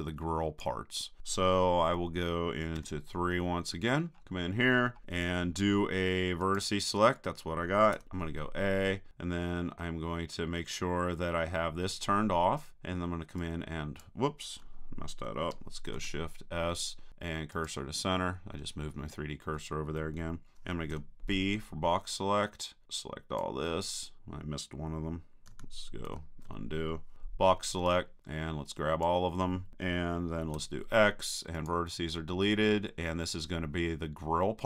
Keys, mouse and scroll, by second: 2.7 KP_3, 3.9-5.5 drag, 6.4-8.4 drag, 8.0 a, 13.4-15.4 drag, 15.9 shift+super+s, 20.9 b, 26.1 super+z, 27.1 b, 30.6 x.